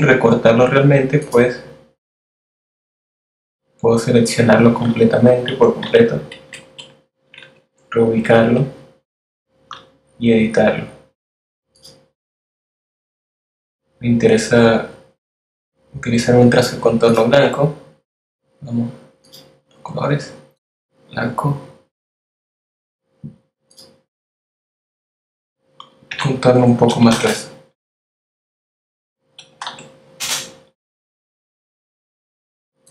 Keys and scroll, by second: 4.9 v, 5.5 shift+Right, 6.4 shift+Down, 7.1 shift+Right, 7.4 shift+Up, 24.9 shift+Left, 26.0 shift+BackSpace, 28.5 BackSpace, 28.7 3, 29.2 Return, 32.4-32.9 typing.